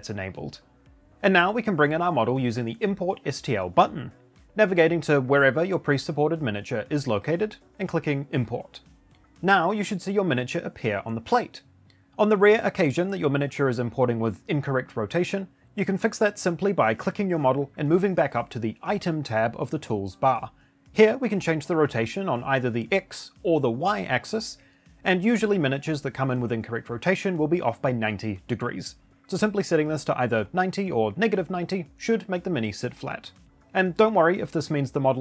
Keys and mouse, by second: 3.1 click.